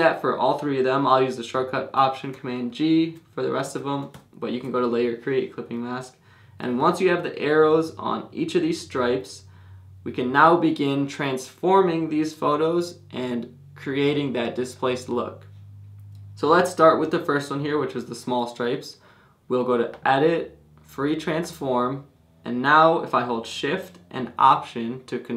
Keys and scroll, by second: 2.7 alt+super+g, 5.0 alt+super+g.